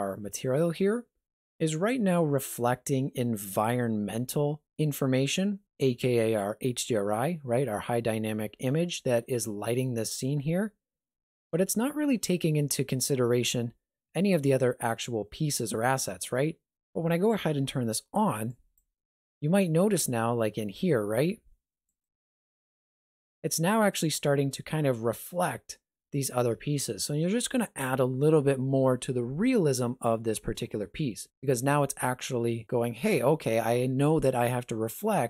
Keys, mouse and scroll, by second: 18.5 click, 21.9 click, 22.9 click.